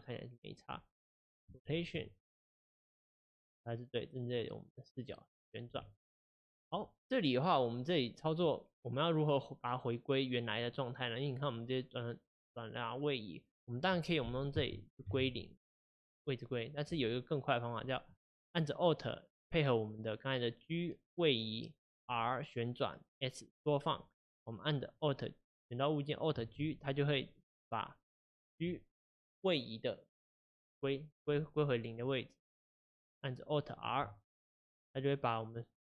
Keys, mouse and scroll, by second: 0.7-1.6 scroll up 4, 1.6-2.4 shift+middle drag, 2.4 click, 2.9 r, 5.7 r, 10.7 click, 15.1-25.1 drag, 26.6 alt+g, 33.4 click, 34.5 alt+r.